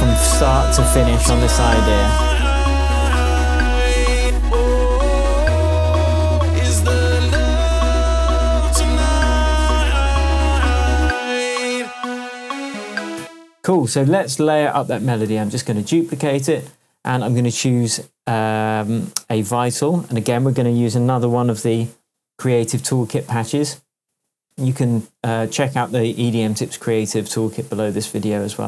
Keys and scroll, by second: 13.2 space, 13.4 shift+Tab, 15.2 super+d.